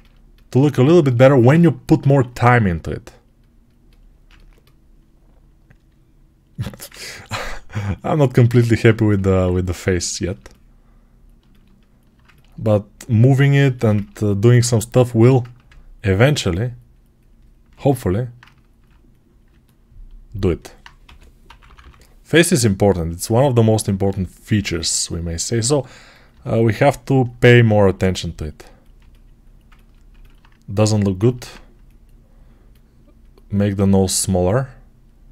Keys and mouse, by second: 1.9 alt+q, 6.5 alt+q, 7.3-13.5 right drag, 15.0 x, 17.9-26.5 alt+right drag, 20.9 g, 21.3-22.9 drag, 21.3 [, 21.5 [, 29.8-35.3 ctrl+alt+drag.